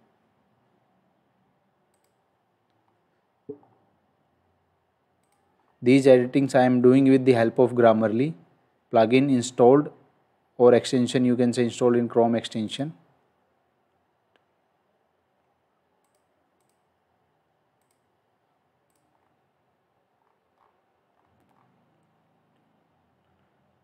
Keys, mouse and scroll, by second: 1.9 click, 2.8 scroll down 1, 5.2 click, 5.6-5.9 scroll down 1, 12.7 click, 16.0 click, 19.1-19.4 scroll down 1, 20.5 scroll up 1, 21.1 scroll down 1.